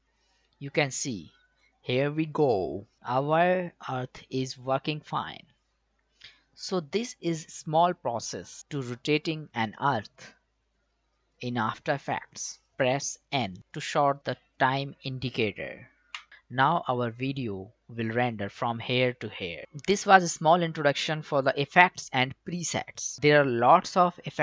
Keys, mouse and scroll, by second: 16.1 n, 19.6-23.9 drag, 23.9 BackSpace.